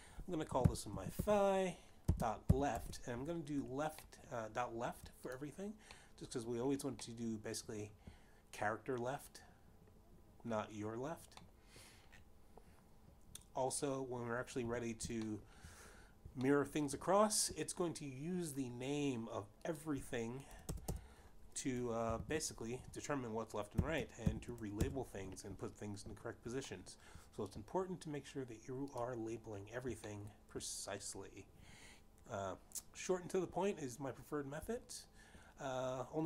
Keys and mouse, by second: 1.1-3.0 typing, 3.5 Return, 4.9 shift+middle click, 6.3 click, 6.7 middle click, 7.7 middle click, 12.2 middle click, 15.4 3, 16.2 shift+middle click, 17.4 shift+middle click, 20.4 click, 21.7-23.7 typing, 24.8 shift+l, 25.3 Return, 27.4 shift+middle click, 29.7 click, 30.9 shift+middle click.